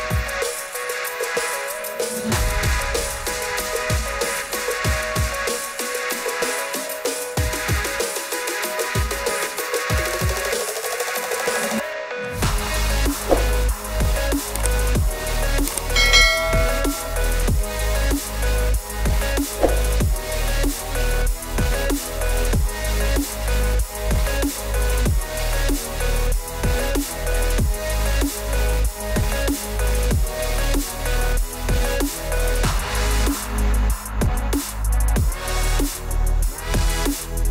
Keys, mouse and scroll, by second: 0.0 click, 0.9 middle click, 1.4 scroll, 2.8 click, 3.2 click, 3.2 scroll, 3.9-4.6 scroll, 4.9 click, 5.2 middle click, 5.2-5.8 scroll, 9.3-9.7 scroll, 10.3 click, 11.3 click, 12.3 click, 13.4-14.2 typing, 17.6 click, 18.2 click, 20.8 click, 22.6 click, 24.2 click, 29.6 click, 31.5 click, 33.2 click, 34.4 click, 36.3 s.